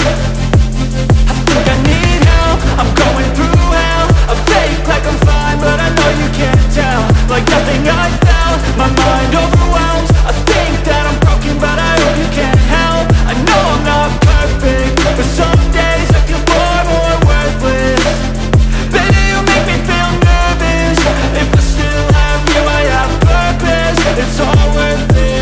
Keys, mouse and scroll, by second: 9.7 ctrl+z, 10.3 ctrl+z, 11.0 ctrl+z, 16.6 right click.